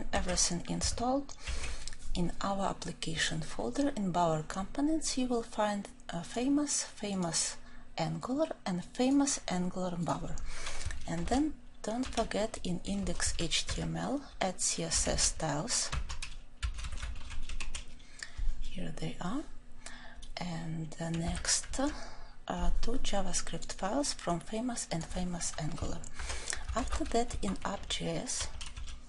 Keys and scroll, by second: 11.2 ctrl+shift+n, 15.9 ctrl+f, 26.8 ctrl+shift+n.